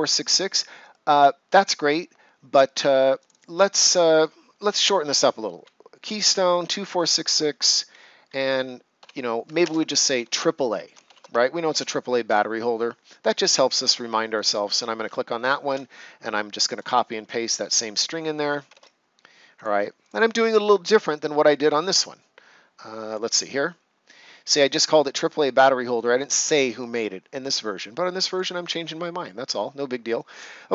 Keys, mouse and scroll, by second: 3.2 click, 8.9 End, 9.6 space, 9.9 shift+a, 11.6 ctrl+c, 12.2 Return, 13.2 click, 16.6 click, 19.5 click, 23.0 click, 28.2 click, 29.5 right click.